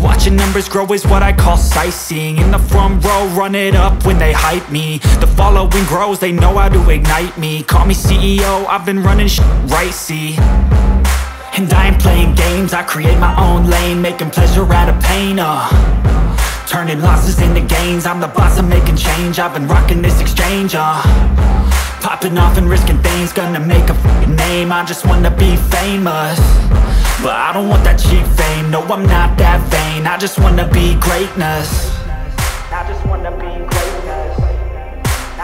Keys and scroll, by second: 3.6 F3, 3.9 F2, 22.4 space, 31.5 Escape.